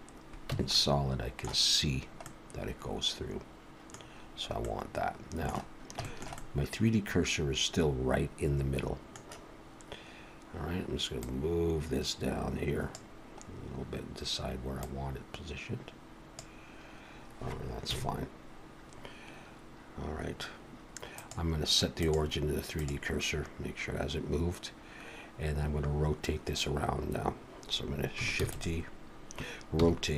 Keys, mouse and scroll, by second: 0.5 Tab, 0.7 middle click, 2.2 middle click, 4.0-4.4 scroll down 3, 4.6 middle click, 5.7-6.0 scroll down 2, 6.0 shift+middle click, 6.4 middle click, 11.2 click, 13.5 scroll up 2, 14.8 click, 17.9 KP_1, 21.2 click, 28.4 shift+d, 29.7 r.